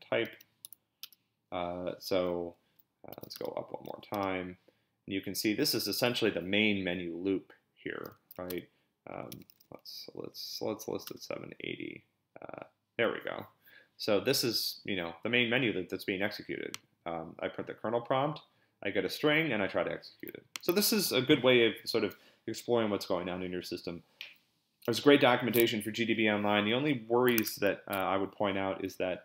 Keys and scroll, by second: 0.0-0.6 typing, 1.0 Return, 2.9-3.9 typing, 4.1 Return, 8.3-10.1 typing, 11.1 Return, 27.4 super+Tab.